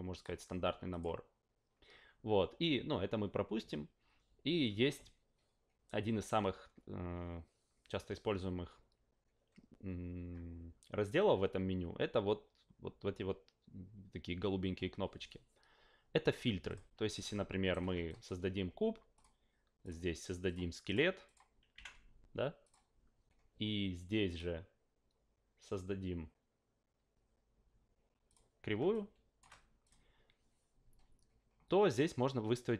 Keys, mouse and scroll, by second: 0.1 click, 0.9 click, 16.7 click, 17.2-17.7 shift+right drag, 18.1 shift+click, 19.1 click, 19.8 click, 20.4 click, 20.8 click, 21.2 click, 21.7 q, 22.6 click, 24.3 click, 28.3 click, 28.9 shift+click, 29.8 click.